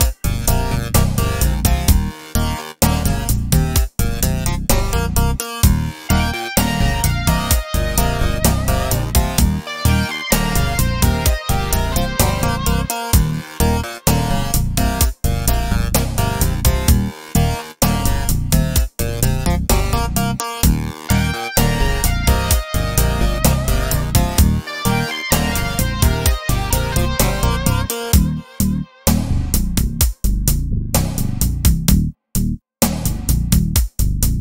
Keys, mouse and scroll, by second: 1.4-2.6 right drag, 2.6 click, 4.8 click, 8.3-9.4 drag, 9.4 right click, 10.8 click, 14.4 right click, 15.6 click, 19.9 right click, 21.0-24.5 drag, 25.3 click.